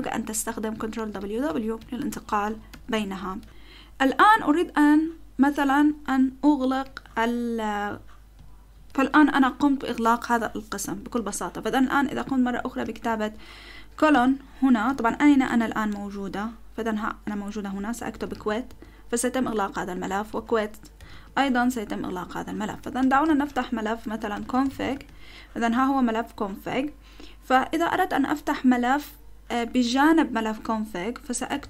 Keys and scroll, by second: 1.0 ctrl+w, 1.2 ctrl+w, 1.5 ctrl+w, 1.8 ctrl+w, 2.1 ctrl+w, 2.7 ctrl+w, 3.4 ctrl+w, 3.4 ctrl+w, 6.8 ctrl+w, 12.2 BackSpace, 13.0 :, 14.1 q, 15.1 BackSpace, 15.2 BackSpace, 15.9 ctrl+w, 17.7-18.9 typing, 19.9-25.2 typing, 25.5 Return, 31.4-31.6 typing.